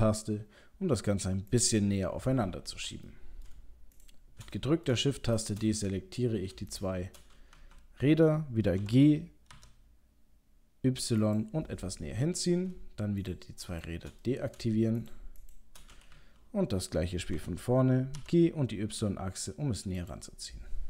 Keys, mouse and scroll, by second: 3.1 middle click, 4.0 shift+click, 4.5 middle click, 5.4 shift+click, 6.7 shift+click, 7.5 KP_3, 8.8 g, 11.8 middle click, 13.2 shift+click, 13.7 shift+click, 14.2 middle click, 15.0 shift+click, 15.3 shift+click, 16.1 KP_3, 17.4 g.